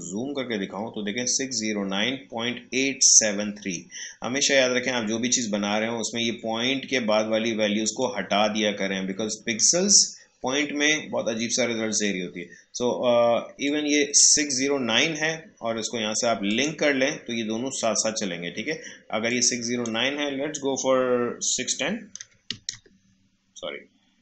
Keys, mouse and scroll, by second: 0.0 shift+scroll up 1, 5.8 shift+scroll down 1, 8.0-12.2 drag, 13.6-16.4 drag, 19.2 click, 19.3-22.2 drag.